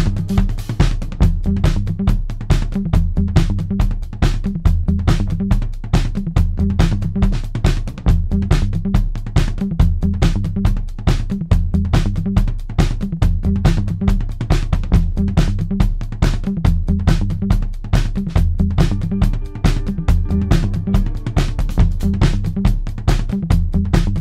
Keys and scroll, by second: 2.8-3.8 typing, 4.4 ctrl+z, 8.2 Delete, 9.5 f, 12.3 4, 17.6-18.9 typing, 20.8 3.